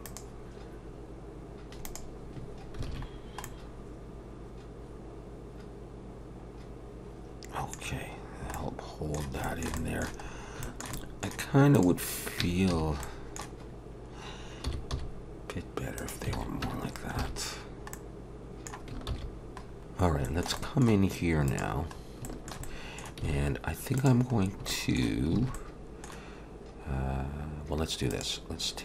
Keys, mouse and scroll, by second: 2.9 alt+a, 3.1-3.4 scroll down 2, 3.4 middle click, 8.0-8.5 scroll down 2, 8.5 middle click, 9.4 shift+middle click, 10.2-10.6 scroll up 3, 10.6 shift+middle click, 10.9 middle click, 11.7 click, 12.4 Tab, 12.7 a, 13.0 middle click, 13.8 scroll up 1, 14.6 s, 16.3 alt+a, 16.6 Tab, 16.9 scroll down 2, 17.2 alt+a, 17.6-17.9 scroll down 2, 17.9 middle click, 19.1 ctrl+s, 19.7 scroll down 1, 20.0 scroll up 5, 20.2 shift+middle click, 20.6 middle click, 21.5 click, 22.0 scroll up 2, 22.2 shift+middle click, 22.6 middle click, 23.3 alt+a, 24.0 click, 24.4 scroll down 2, 24.7 shift+middle click, 25.4 alt+a, 25.5 middle click, 28.1 click.